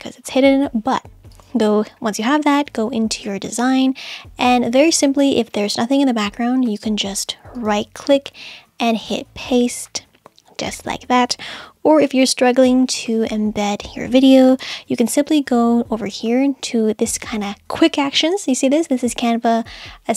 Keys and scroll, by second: 14.6 super+z.